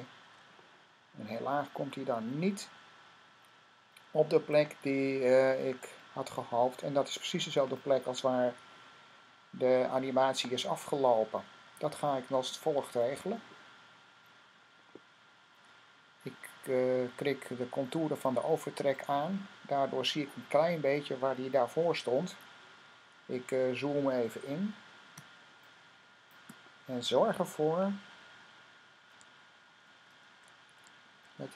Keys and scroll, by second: 23.1 =, 25.0 super+=, 27.9 Left, 28.4 Left, 29.3 Left, 29.5 typing, 29.6 Left.